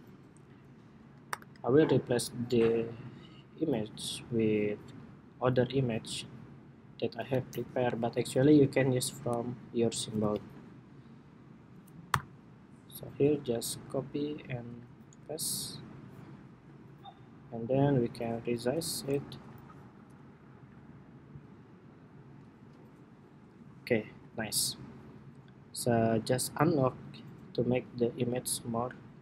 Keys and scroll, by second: 1.0 shift+super+y, 9.9 super+c, 11.1 super+c, 11.8 super+y, 13.1 super+y, 15.1 super+v.